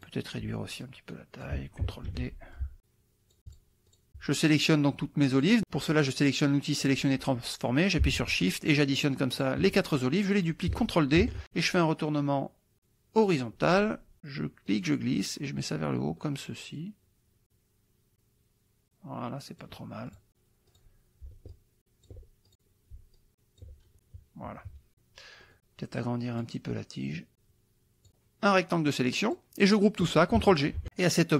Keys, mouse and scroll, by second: 0.1 click, 0.8 ctrl+click, 2.1 ctrl+d, 2.6 ctrl+click, 3.5 shift+click, 4.0 shift+click, 5.4 click, 6.8 click, 8.4 shift+click, 9.0 shift+click, 9.4 shift+click, 11.4 ctrl+d, 13.2 click, 14.7-19.8 drag, 20.1 click, 20.8 click, 21.5 ctrl+click, 22.5 ctrl+click, 23.2 ctrl+click, 24.5 KP_Subtract, 25.5 middle click, 26.3 click, 27.1-29.6 drag.